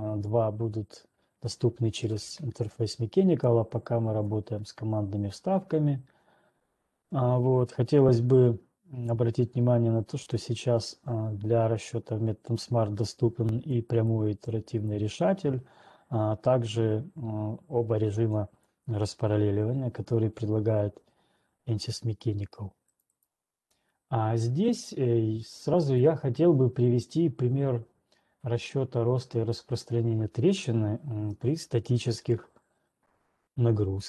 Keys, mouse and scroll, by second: 0.2 click, 4.7 click, 14.2 click, 15.2 click, 18.7 click, 23.2 right click, 26.7 middle click, 31.9 alt+Tab, 31.9 scroll.